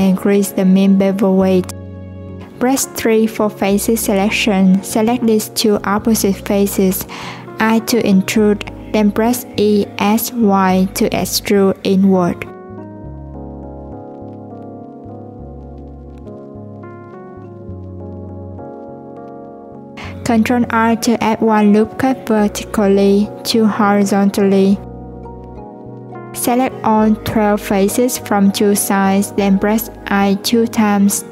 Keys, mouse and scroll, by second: 1.0-2.7 drag, 5.0 click, 6.1-7.8 middle drag, 7.8 click, 9.6-10.6 middle drag, 18.4-21.0 middle drag, 21.0 ctrl+r, 22.8 ctrl+r, 27.2 click, 27.6 3, 28.2 click, 29.8-31.3 middle drag.